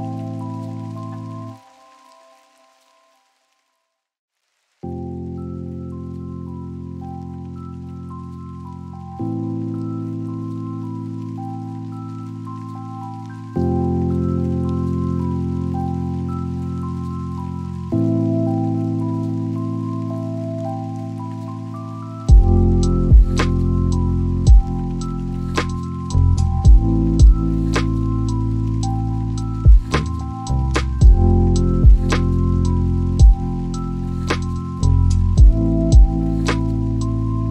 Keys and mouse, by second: 10.2 y, 15.5 shift+click, 16.3 click, 17.4 g, 18.2 y, 22.4 shift+click, 26.9 shift+a.